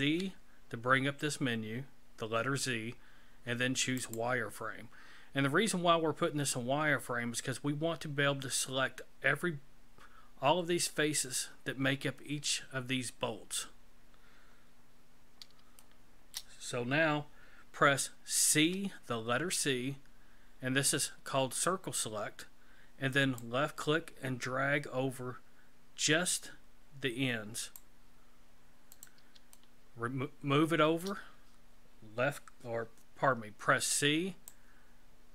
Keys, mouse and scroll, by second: 0.0 z, 15.0-15.5 scroll up 2, 15.8 shift+middle click, 18.5 c, 29.5 shift+middle click, 33.7 c.